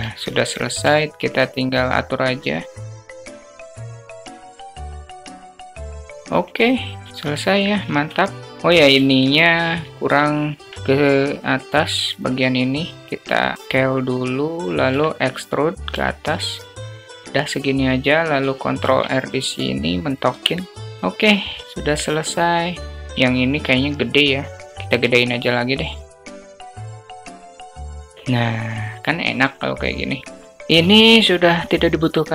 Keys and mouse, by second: 0.8-1.1 shift+drag, 1.1 shift+middle click, 2.9 click, 3.9 ctrl+click, 4.2 click, 5.4 alt+shift+middle click, 5.6 click, 6.2 click, 7.1-7.5 alt+middle drag, 9.7 middle drag, 9.9 alt+shift+click, 10.2 alt+shift+drag, 10.7 Tab, 11.2 click, 11.9 click, 12.1-13.4 drag, 13.5 s, 14.8 e, 18.0 e, 18.7 ctrl+r, 20.2 Tab, 20.5 `, 20.7 click, 20.7 /, 21.5 alt+shift+click, 26.3 click, 26.9 click, 31.2 click.